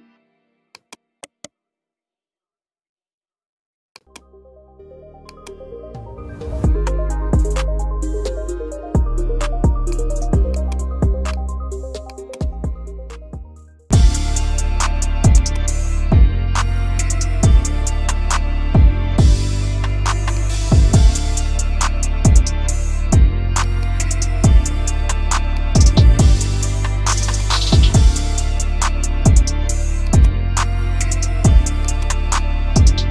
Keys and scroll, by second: 8.3 F2, 10.5 F2, 13.4 F4, 18.9 F3, 19.3 Escape, 19.5 F2, 24.8 Escape, 28.6 Escape.